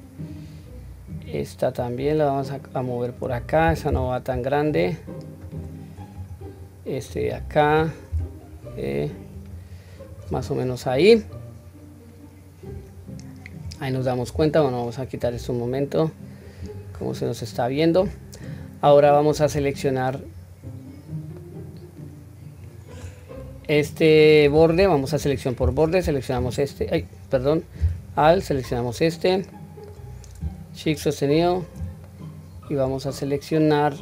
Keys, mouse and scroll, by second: 0.0 click, 0.8 click, 1.5-3.0 drag, 3.6 g, 5.9 click, 6.7 click, 7.8 g, 10.9 scroll up 1, 12.4-14.4 scroll down 1, 14.4-14.8 scroll down 1, 14.8 click, 16.2 click, 17.1-19.2 middle drag, 20.4-21.1 scroll down 1, 21.1-22.7 middle drag, 28.1 alt+click, 29.2 alt+middle click, 30.6 alt+shift+click, 31.8-33.8 middle drag.